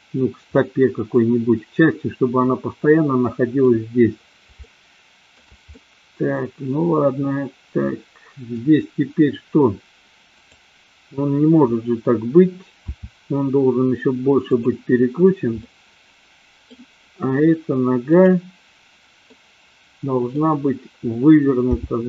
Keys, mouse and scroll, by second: 0.5-2.4 middle drag, 2.9-3.7 middle drag, 4.7-5.5 shift+middle drag, 5.8-8.8 middle drag, 12.8 r, 14.7 drag, 15.7-16.8 middle drag, 18.0-18.8 drag, 19.3-20.4 middle drag, 21.5 g.